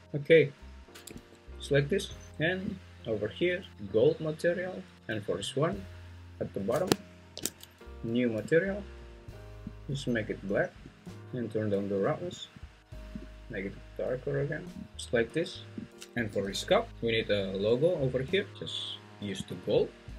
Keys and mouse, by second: 1.1 `, 3.7 click, 8.5 click, 9.7 click, 12.0 click, 16.3 g, 16.9 Escape, 19.6-20.1 drag.